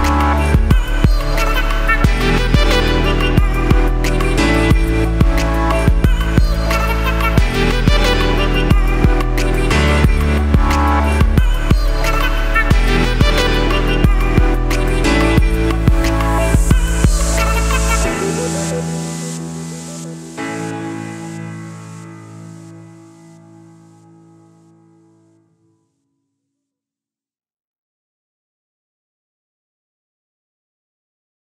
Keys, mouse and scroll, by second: 1.6-2.4 scroll down 2, 2.4-4.7 scroll up 2, 4.7 click, 7.5-7.9 scroll down 1, 10.6 a, 14.3-21.3 drag, 17.7 Tab, 18.3 scroll up 1, 19.8 scroll down 1, 20.7-21.3 scroll up 1, 22.2 click, 24.8 ctrl+v, 26.3-28.4 drag, 28.4-29.5 middle drag, 28.4-29.2 scroll down 2, 29.2-29.5 scroll down 1, 29.5-31.5 drag.